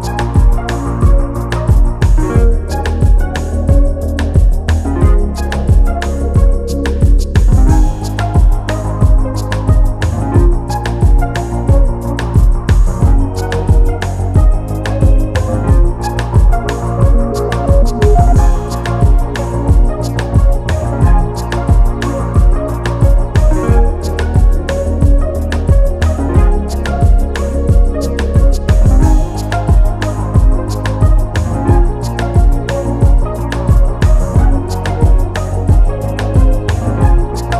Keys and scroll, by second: 10.3 Return, 11.7 ctrl+shift+], 20.3 Left, 20.7 Left, 21.2 Left, 22.6 Left.